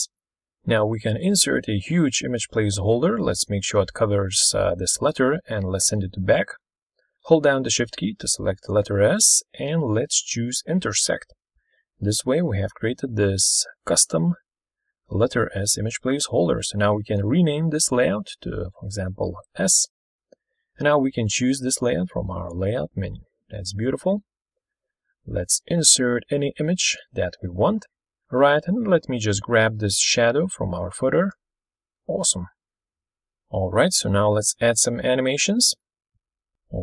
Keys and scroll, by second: 34.5 super+Left.